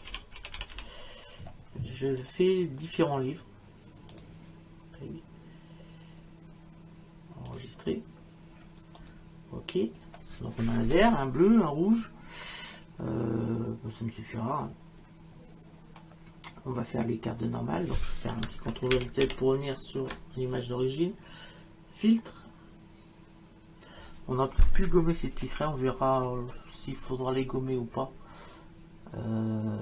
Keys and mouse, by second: 0.0-1.2 typing, 2.2 click, 4.1 click, 7.5 click, 9.0 click, 19.0 ctrl+alt+z.